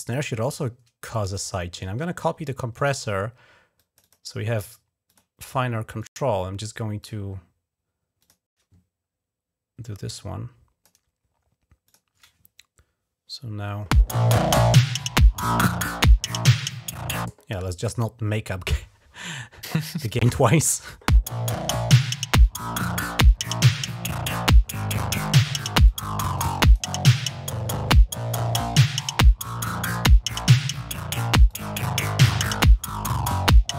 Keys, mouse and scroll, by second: 0.9 click, 1.6 right click, 2.6 click, 3.6 click, 3.9 click, 4.9 click, 5.9 click, 6.8 click, 8.0 click, 9.9 click, 10.7 click, 11.6 click, 15.4 click, 22.2 click, 24.3 click, 25.7 click, 26.4 click, 26.7 click, 31.3 click.